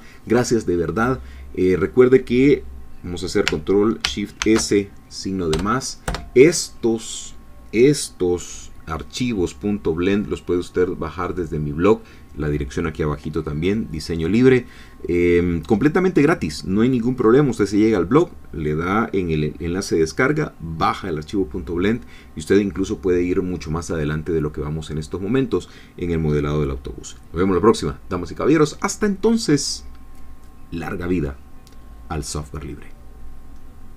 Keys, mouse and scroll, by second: 4.4 ctrl+shift+s, 6.1 Return.